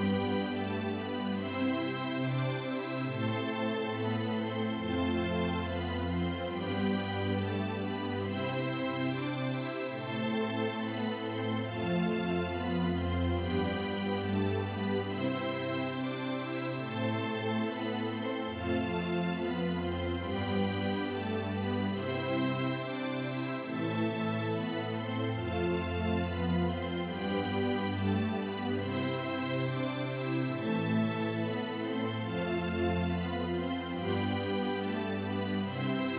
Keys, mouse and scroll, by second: 6.5-8.5 drag, 18.6-20.8 drag, 33.5 click.